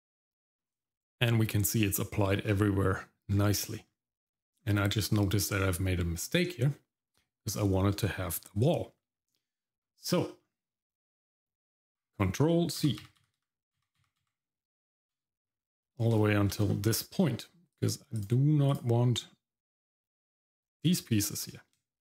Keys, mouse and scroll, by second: 0.1 middle click, 0.5 scroll down 1, 0.8 middle click, 1.8 shift+middle click, 2.4-3.2 scroll up 1, 3.2 scroll up 1, 3.3 scroll down 1, 3.8 middle click, 4.1 shift+middle click, 4.6 scroll down 1, 4.9 middle click, 10.3 middle click, 11.9 ctrl+z, 12.8 ctrl+z, 13.0 ctrl+z, 13.2 ctrl+z, 13.4 ctrl+z, 13.8 ctrl+z, 14.0 ctrl+z, 14.2 ctrl+z, 15.4-16.1 scroll up 1, 16.2 shift+middle click, 16.7 middle click, 17.7 shift+click, 18.2 shift+click, 18.7 shift+click, 20.0 shift+click.